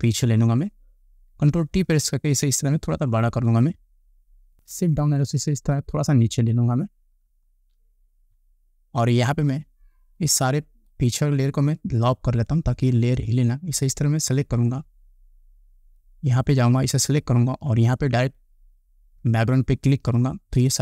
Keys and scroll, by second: 1.5 ctrl+t, 4.9 shift+Down.